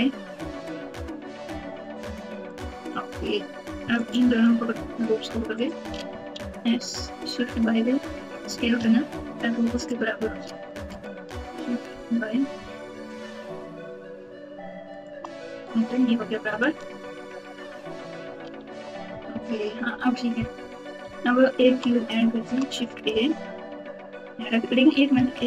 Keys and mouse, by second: 3.9 alt+click, 5.6 alt+click, 6.3 s, 7.4 right click, 10.9 s, 15.6 Tab, 18.4 alt+z, 19.0 KP_4, 19.2 KP_4, 20.5 KP_7, 21.0 KP_Subtract, 22.4 shift+a, 25.3 KP_2.